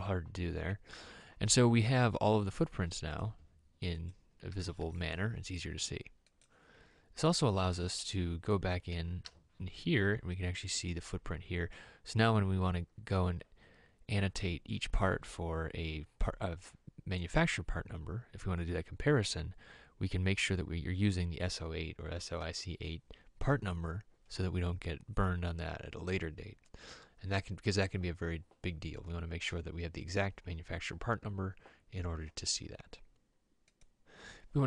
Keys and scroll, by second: 2.4 m, 9.5 e.